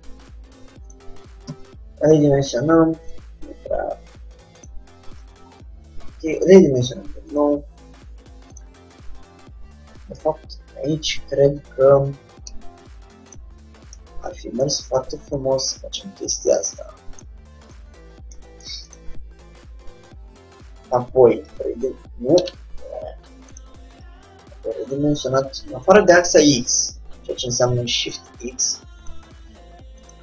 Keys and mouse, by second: 1.6 s, 3.7 g, 5.0-7.1 middle drag, 6.4 s, 7.9 g, 8.8-10.6 drag, 10.2 ctrl+z, 11.7 ctrl+z, 12.7 Tab, 13.4-15.0 drag, 15.0-16.2 middle drag, 16.2-17.3 drag, 16.9 Tab, 19.9-21.0 drag, 21.8 s, 23.7-30.2 drag.